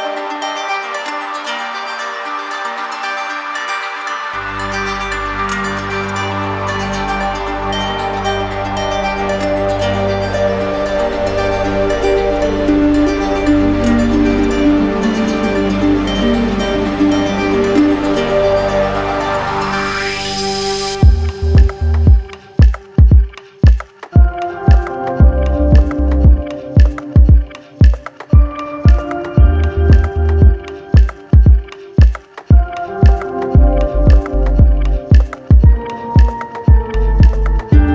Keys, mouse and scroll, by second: 5.5 click, 6.3 d, 8.1 click, 8.8 ctrl+z, 10.3 click, 10.8 shift+click, 11.7 click, 12.2 alt+click, 15.4 click, 19.1 click, 19.5 ctrl+click, 21.9 click, 23.2 ctrl+d, 23.4 ctrl+d, 23.7 ctrl+d, 24.0 ctrl+d, 25.2 click, 28.3 click, 29.2 click, 30.0 shift+click, 30.2 shift+click, 31.6 alt+click, 32.5 alt+click, 33.8 alt+click, 36.4 alt+click, 37.0 click.